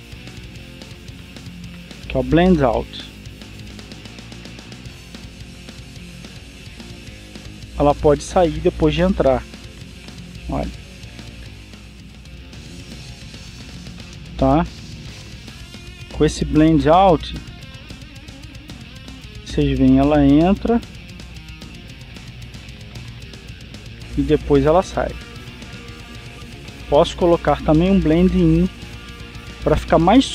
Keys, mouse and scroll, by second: 2.6 click, 3.7-15.6 drag, 16.8 click, 17.6-19.9 drag, 20.0-25.1 drag, 29.1-30.3 drag.